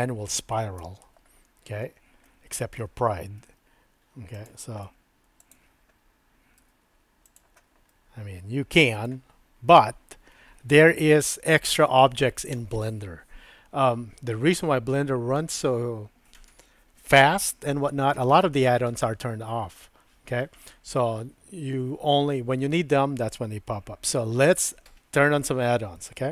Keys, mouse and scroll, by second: 0.8 KP_7, 2.5 shift+middle click, 3.4 g, 4.9 e, 6.6 e, 8.0-9.2 middle drag, 24.4 Tab.